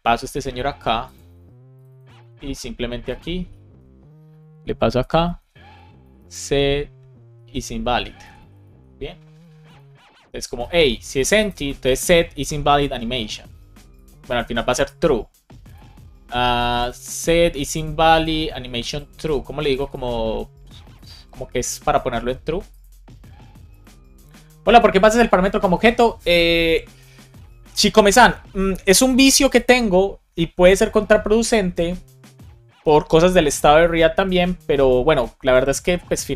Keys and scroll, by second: 1.3 super+v, 2.1 super+c, 3.4 super+v, 4.9 shift+9, 5.3 shift+[, 5.6 space, 7.3 Return, 7.9 space, 8.1 Right, 8.5 super+s.